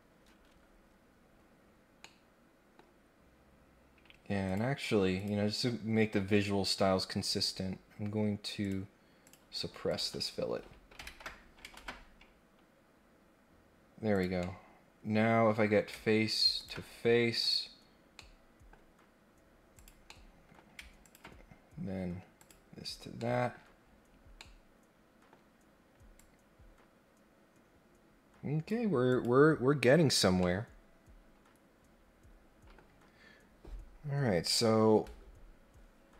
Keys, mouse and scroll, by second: 0.2-1.3 scroll up 3, 2.0 middle click, 4.4 click, 5.2 click, 6.4 scroll up 2, 7.3 scroll down 2, 8.6 click, 9.2 click, 9.8 click, 11.7 ctrl+Tab, 14.1 click, 14.4-15.6 middle drag, 16.5 ctrl+click, 17.4 click, 18.1 middle click, 19.7 click, 20.1 middle click, 21.0 ctrl+click, 22.4 click, 23.2 middle click, 23.5 scroll up 1, 23.7-24.4 scroll down 2, 24.4 middle click, 25.1 middle click, 26.2-28.6 drag, 29.1 click, 30.4-32.7 middle drag.